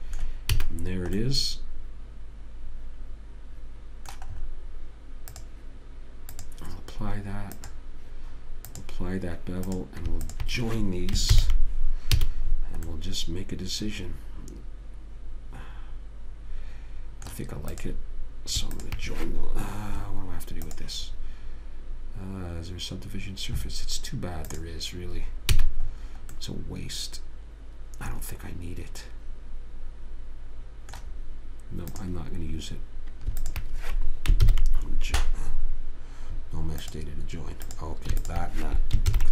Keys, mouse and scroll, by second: 0.9 a, 4.8 middle click, 5.7-6.8 right drag, 6.8-11.6 drag, 11.6 ctrl+j, 12.5 a, 18.0-20.7 drag, 25.9 a, 26.4-28.1 middle drag, 28.3 middle click, 32.3-35.4 drag, 34.8 ctrl+j, 37.2 click, 38.0 click.